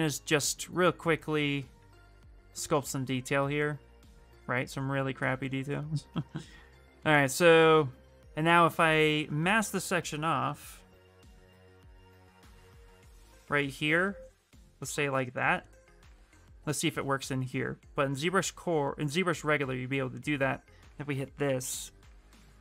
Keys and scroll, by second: 0.0-0.4 typing, 1.5 ctrl+z, 1.7 ctrl+z.